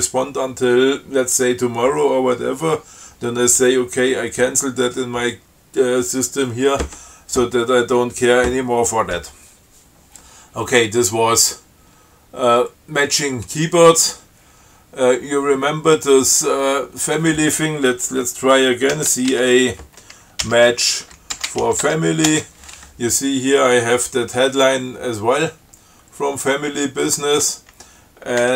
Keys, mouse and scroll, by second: 19.2 ctrl+c, 19.6 ctrl+a, 20.7-22.4 typing, 22.5 shift+Return, 25.9-26.3 scroll down 2, 26.5 scroll up 2.